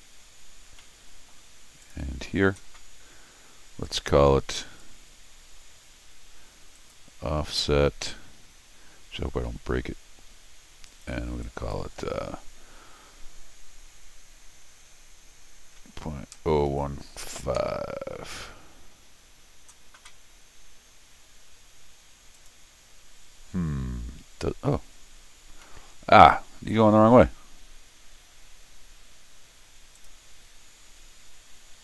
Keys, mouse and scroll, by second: 0.8 middle click, 1.8 click, 3.8 click, 6.8 click, 10.9 click, 11.4 click, 22.3 click, 25.5 scroll up 1, 25.6 middle click, 30.0 click.